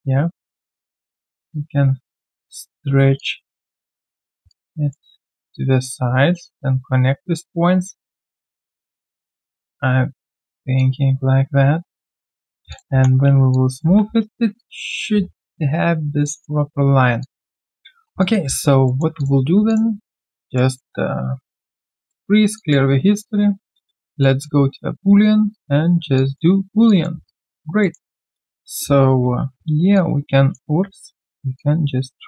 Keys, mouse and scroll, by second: 1.2 alt+middle click, 1.5 alt+click, 4.5 alt+right click, 4.9 alt+middle click, 7.3 alt+click, 8.5 alt+right click, 8.8 alt+click, 10.4 alt+right click, 10.7 alt+click, 13.5 alt+click, 13.8 alt+1, 14.2 alt+right click, 14.5 alt+click, 16.2 alt+middle click, 17.2 alt+click, 18.4 alt+q, 19.7 shift+click, 20.4 alt+click, 20.7 alt+middle click, 22.0 double click, 22.5 alt+click, 26.1 alt+click, 26.5 alt+right click, 26.8 alt+click, 27.2 right click, 27.2 q, 27.8 alt+middle click, 28.0 alt+right click, 29.2 ctrl+shift+q, 30.6 ctrl+z.